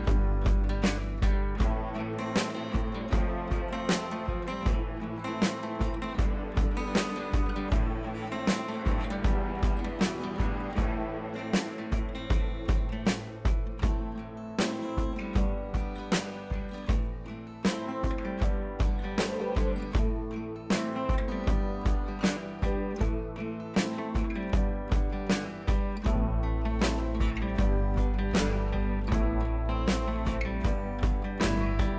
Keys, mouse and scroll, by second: 0.5 click, 1.1 scroll down 1, 2.2 scroll up 1, 2.9-4.4 drag, 4.4 ctrl+t, 5.1-7.7 alt+drag, 7.7 scroll up 1, 8.1 click, 9.1 ctrl+t, 9.8-14.1 alt+drag, 14.0 click, 14.1 Up, 15.0 Up, 15.5 click, 15.8 scroll down 2, 17.4 scroll up 1, 19.4 click, 24.9 click, 28.7 click, 29.3 scroll up 1, 29.9 ctrl+t, 30.7 ctrl+r, 31.3 ctrl+t.